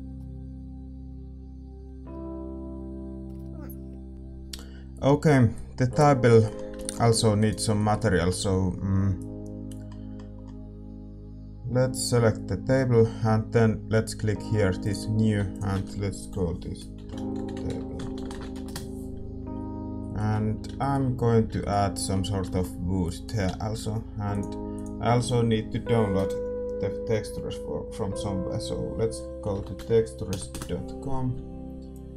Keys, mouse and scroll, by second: 0.2 click, 1.1 click, 2.0 middle click, 2.3-4.1 drag, 4.1-9.2 middle drag, 7.3-9.4 right drag, 9.2-18.6 drag, 18.6 BackSpace, 32.1 BackSpace.